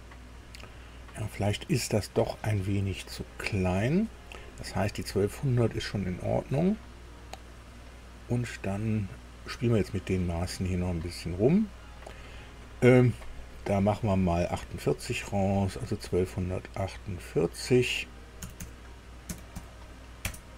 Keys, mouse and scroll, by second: 0.6 scroll down 2, 1.6 shift+middle click, 2.9-3.4 scroll up 4, 4.3-4.9 scroll up 4, 5.5 right click, 6.6-8.1 drag, 9.2 click, 11.3 click, 13.2 click, 15.3 click, 17.2 click, 18.4 Delete, 18.6 Delete, 19.3 KP_4, 19.5 KP_8, 20.2 KP_Enter.